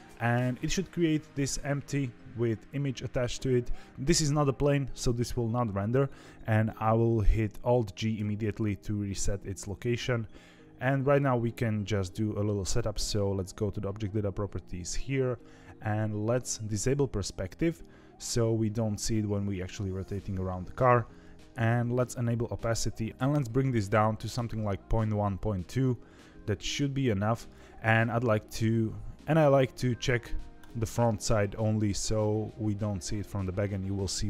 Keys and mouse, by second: 8.1 alt+g, 13.3 click, 17.5 click, 22.0 click, 22.7 click, 23.5-27.5 drag, 30.5 click.